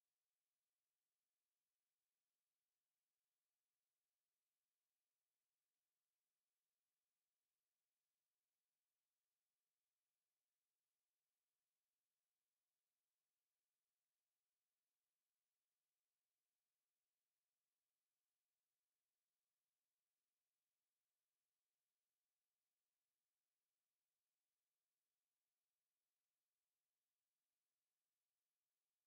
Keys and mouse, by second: 0.3 alt+middle click, 0.8 alt+middle click, 1.4 alt+middle click, 2.1 shift+click, 3.1 shift+click, 3.3 shift+click, 3.8 alt+middle click, 4.3 alt+middle click, 4.8 alt+click, 5.6 alt+middle click, 6.1 click, 8.1 ctrl+z, 9.2 click, 12.8 z, 13.2 click, 14.0 alt+click, 15.0 click, 17.0 shift+click, 18.1 alt+middle click, 18.6 alt+click, 19.6 alt+click, 20.2 shift+click, 21.6 shift+click, 22.5 alt+middle click, 24.3 ctrl+space, 25.4 shift+right click, 25.5 shift+right click, 26.2 shift+right click, 27.3 shift+right click.